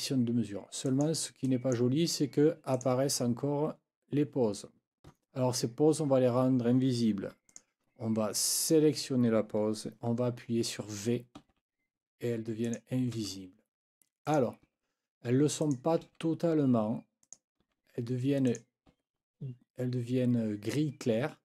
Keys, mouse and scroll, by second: 0.9 click, 1.4 click, 2.7 click, 7.5 click, 8.6 click, 11.4 v, 12.6 click, 13.1 v, 14.3 click, 14.7 v, 15.6 click, 16.0 v, 17.2 click, 17.6 v, 18.5 click, 18.9 v.